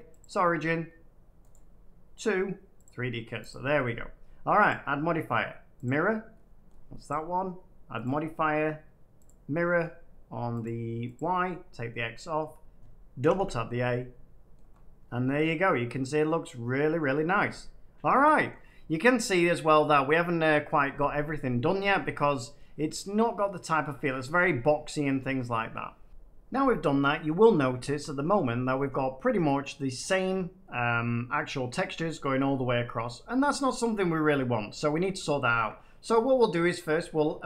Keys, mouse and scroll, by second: 0.1 click, 1.4 right click, 2.8 click, 3.4 click, 4.6 click, 5.8 click, 6.7 middle click, 7.0 click, 7.8-8.9 drag, 9.2 click, 10.6-12.0 drag, 12.3-13.3 middle drag, 13.1 a, 13.3 a, 13.5 middle click, 14.6 scroll up 4, 16.9 middle click, 17.1-17.5 scroll up 3, 18.0 middle click, 18.4-20.3 middle drag, 21.9-23.9 middle drag, 24.0 middle click, 27.5 middle click, 27.9 shift+middle click, 28.3 middle click, 29.1-30.2 middle drag, 30.8 middle click, 32.1 middle click, 33.0 middle click, 34.0 middle click, 35.5 shift+middle click, 35.5 shift+middle click, 36.7 middle click.